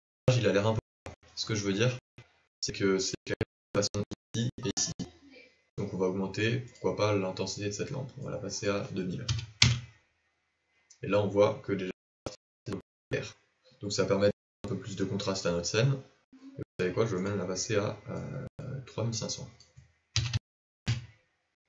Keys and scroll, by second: 20.1 KP_0.